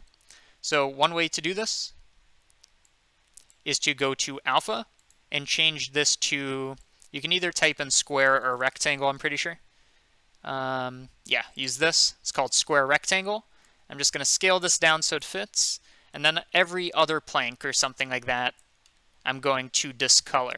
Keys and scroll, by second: 0.1 ctrl+z, 8.1-9.7 typing.